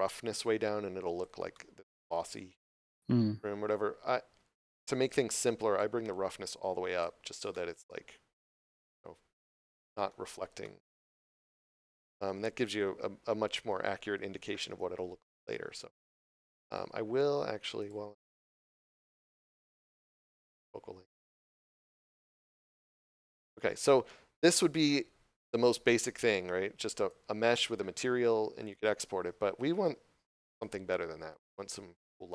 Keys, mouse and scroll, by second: 1.4 middle click, 5.6 click, 7.4 middle click, 11.2 middle click, 17.7 click, 20.2 2, 21.0 Return, 21.8 middle click, 26.8 right click.